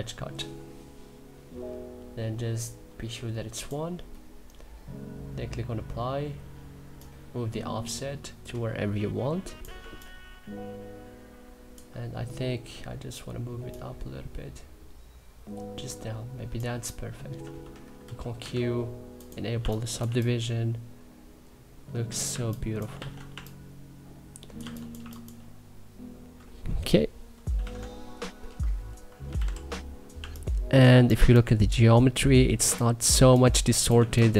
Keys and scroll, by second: 9.4 3, 18.1 q, 19.2 2, 22.6 e, 23.0 3, 24.6 1, 26.9-27.7 typing, 29.0 b, 29.8 2, 30.7 3, 34.0 1.